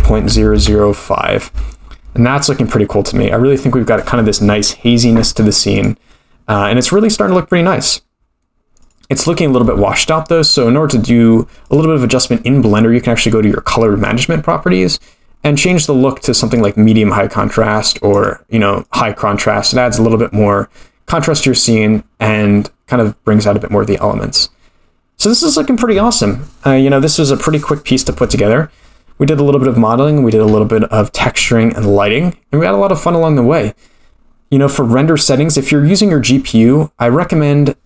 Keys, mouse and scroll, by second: 5.7 click, 8.8 click, 9.8-11.6 scroll down 6, 11.6 click, 11.9-13.7 scroll down 6, 15.7-16.7 drag, 18.1-21.1 drag, 29.2-32.4 scroll up 21, 32.4-33.6 scroll up 4, 36.4-37.7 scroll down 9, 37.7-37.8 scroll down 4.